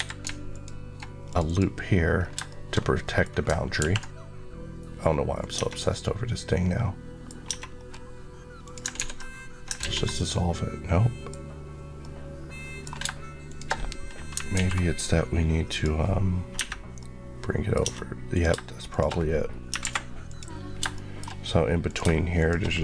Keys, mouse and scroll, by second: 0.4 alt+click, 1.2 click, 1.3 Left, 2.0 scroll down 2, 2.3 shift+middle click, 2.9 middle click, 3.1-3.6 scroll up 2, 3.6 ctrl+b, 5.3 click, 5.4 Tab, 5.8 middle click, 7.4 Tab, 7.6 scroll up 1, 8.5 click, 8.9 ctrl+x, 10.0 z, 10.0 middle click, 13.3 shift+click, 14.4 alt+m, 15.5 click, 16.4 Tab, 16.9 middle click, 17.7 Tab, 18.2 click, 18.8 shift+click, 19.7 m, 20.2 click, 20.7 shift+click, 20.8 shift+middle click, 21.7 click, 21.9 shift+click.